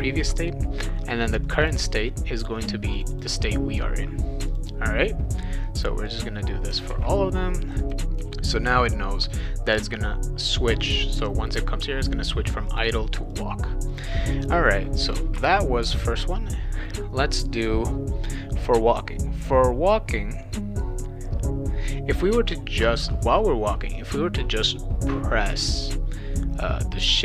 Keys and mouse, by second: 1.3 click, 1.4 click, 1.7 click, 2.9 click, 3.1 click, 4.5 click, 5.8 click, 6.9 ctrl+v, 7.8 click, 8.0 click, 8.2 ctrl+v, 8.7 click, 9.1 click, 10.9 click, 12.7 click, 13.3 click, 13.9 click, 14.7 click, 15.3 Return, 25.5-27.0 drag.